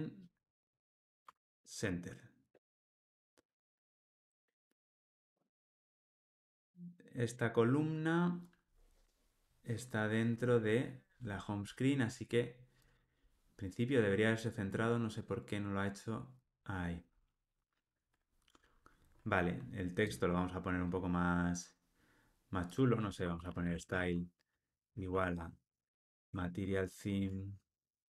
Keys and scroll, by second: 1.2 Tab, 2.7 alt+Return, 12.9 ctrl+r, 24.9 Return, 27.1 Tab.